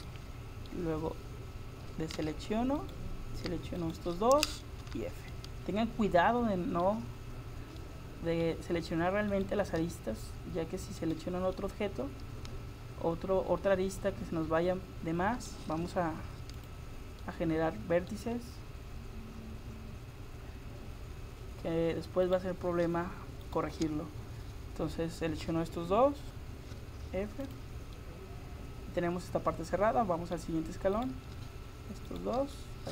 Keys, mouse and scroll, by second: 0.1-2.2 middle drag, 2.2 a, 2.8-5.8 right drag, 4.8 f, 9.4-12.7 right drag, 12.7 middle click, 13.2 middle click, 15.8 f, 16.6-18.5 drag, 18.5 middle click, 22.3-26.8 right drag, 26.8 f, 27.4-29.2 drag, 31.0-32.9 right drag.